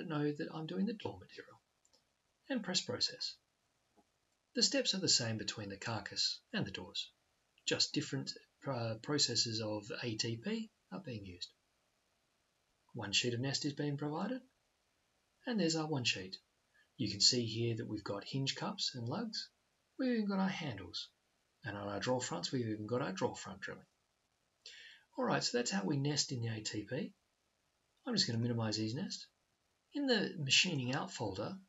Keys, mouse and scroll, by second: 2.4 click.